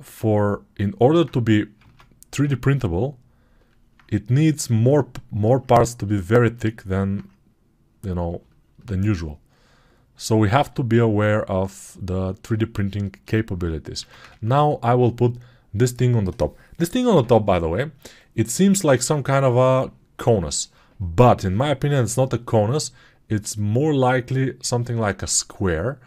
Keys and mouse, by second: 1.6 ctrl+Tab, 13.8 ctrl+Tab, 14.1 shift+a.